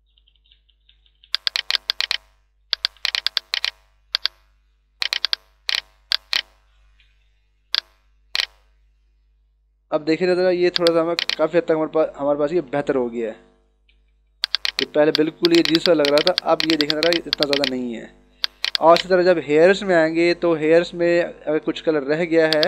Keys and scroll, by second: 2.5 [, 7.7 h, 9.5 b, 13.5 ].